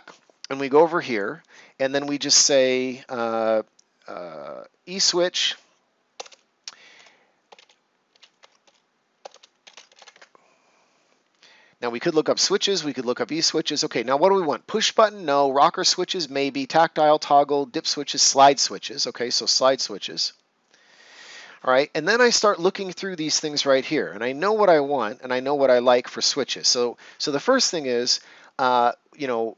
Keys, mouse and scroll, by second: 4.9 typing, 6.1-8.1 typing, 9.2-9.9 typing, 10.1 Return, 19.0 click, 21.5 scroll down 1, 27.1 scroll up 1.